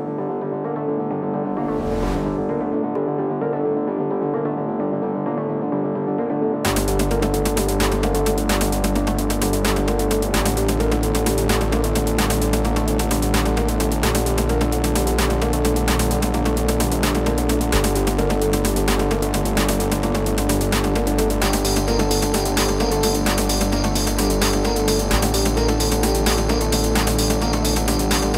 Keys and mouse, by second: 0.3 click, 1.8 click, 4.2 click, 4.9-5.9 typing, 17.8 click, 18.5 click, 19.9 click, 21.8 click.